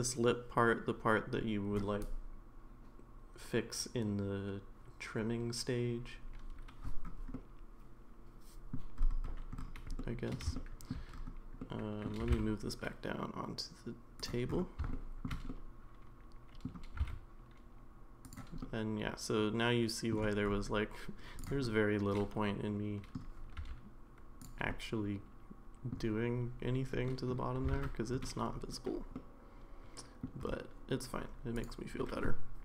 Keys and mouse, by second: 7.4-8.7 middle drag, 10.0-10.3 middle drag, 10.6-10.9 shift+middle drag, 11.7-12.0 middle drag, 12.2 g, 14.9-15.3 middle drag, 15.5-16.7 middle drag, 16.9 g, 18.7-20.1 middle drag, 21.4 click, 21.6-23.2 middle drag, 23.6 r, 24.7-25.9 middle drag, 27.1 middle drag, 27.7 ctrl+z, 29.2-30.2 middle drag, 31.6 click, 32.0-32.6 middle drag.